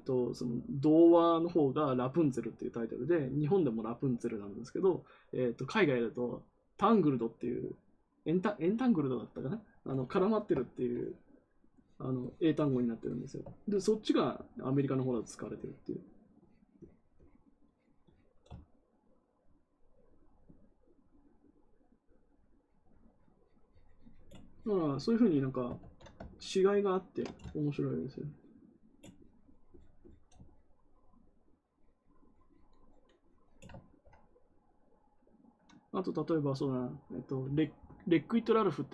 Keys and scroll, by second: 25.7 ctrl+z.